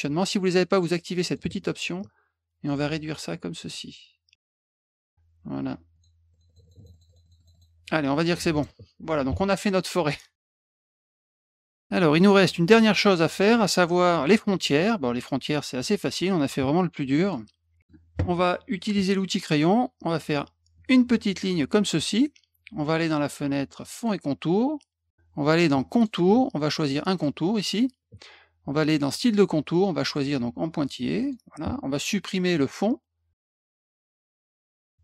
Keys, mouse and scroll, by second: 0.7 click, 1.2 click, 2.6-5.0 ctrl+drag, 5.9 click, 6.3 click, 6.4 click, 6.6 click, 6.8 click, 6.9 click, 7.0 click, 7.2 click, 7.4 click, 7.5 click, 8.5 click, 10.8 middle click, 11.3 click, 15.5 middle drag, 17.2 click, 17.8 middle click, 19.4 click, 20.7 click, 23.9 click, 25.9 click, 27.0 click, 29.1 click, 29.8 click, 31.2 click, 32.5 click, 33.5 click, 34.0 middle click.